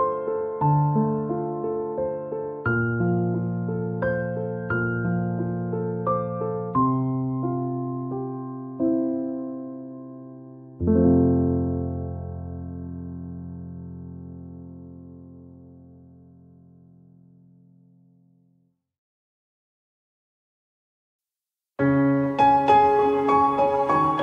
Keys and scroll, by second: 9.0 ctrl+-.